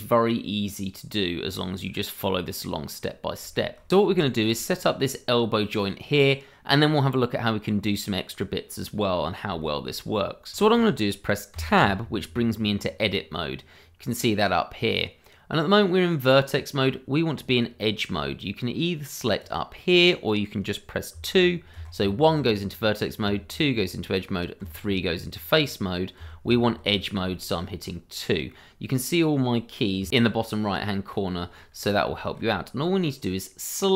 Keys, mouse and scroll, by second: 2.8 scroll up 1, 3.5 shift+middle click, 3.6 middle click, 3.7 shift+middle click, 3.9 scroll down 1, 4.2 shift+middle click, 4.2 middle click, 4.3 shift+middle click, 4.5 scroll up 1, 4.8 middle click, 5.5-6.3 scroll down 1, 6.3 middle click, 9.8 shift+middle click, 10.3 middle click, 10.5 shift+middle click, 11.5 Tab, 19.4 click, 21.1 2, 21.7 1, 23.2 2, 24.6 3, 26.2 2, 27.3 shift+middle click, 27.4 middle click, 27.4 shift+middle click, 30.0 2, 31.7-32.1 scroll up 1, 32.2 shift+middle click, 32.4 scroll up 1, 32.8 middle click.